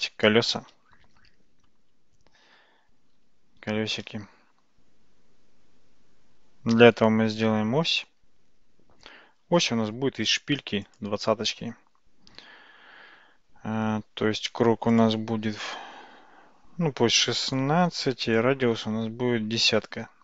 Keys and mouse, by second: 3.9 shift+a, 15.0-17.7 drag, 18.3-20.2 drag.